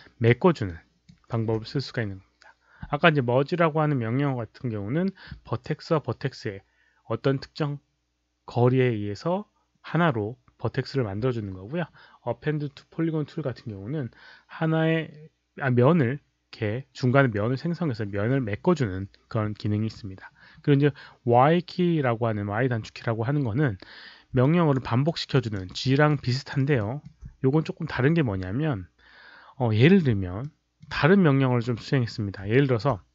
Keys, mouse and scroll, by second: 0.6 alt+right click, 20.3 scroll down 2, 24.4 alt+click, 24.7 alt+right click, 25.2 alt+click, 25.5 alt+right click, 25.8 alt+middle click, 26.2 alt+click, 26.7 alt+middle drag, 30.3-30.7 alt+middle drag, 30.5 alt+click, 30.5 alt+right click, 32.5 alt+right click.